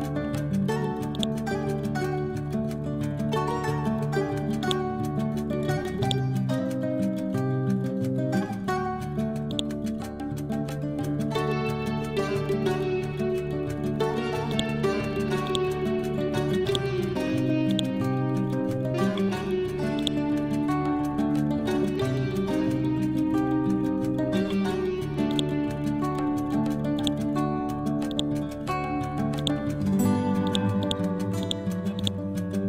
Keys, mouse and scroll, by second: 3.0-4.7 scroll up 1, 4.7-9.5 drag, 9.5-15.9 drag, 15.9-16.7 scroll down 1, 17.4 click, 17.7 shift+click, 18.8-20.0 scroll up 1, 20.0-22.6 drag, 22.6 scroll down 1, 24.6-25.2 scroll up 1, 25.4-29.4 shift+drag, 29.4 right click, 30.5 click, 31.5-32.6 ctrl+drag.